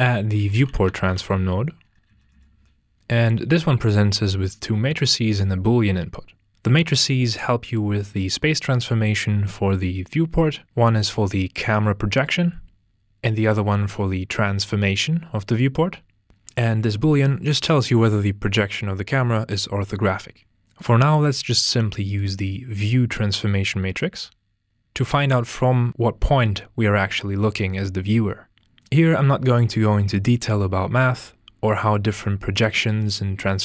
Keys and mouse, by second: 2.4 click, 2.9 click, 20.8 click.